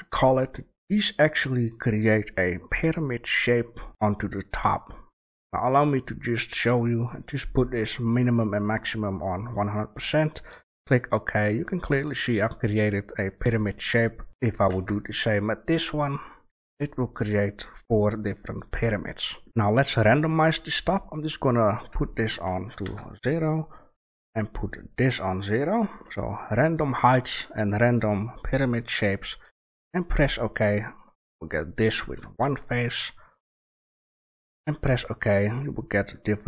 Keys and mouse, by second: 11.5-13.3 middle drag, 14.3-15.9 right drag, 14.7 shift+a, 18.3-19.2 middle drag, 19.4 Delete, 19.4 shift+a, 31.0-34.8 drag, 32.2 shift+a, 35.4 drag, 36.1-36.4 drag.